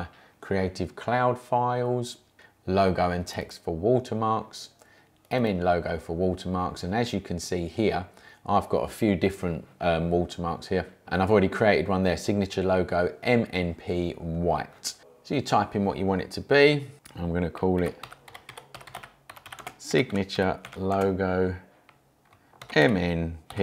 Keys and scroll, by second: 15.0 BackSpace, 17.6-21.1 typing, 22.4-23.6 typing.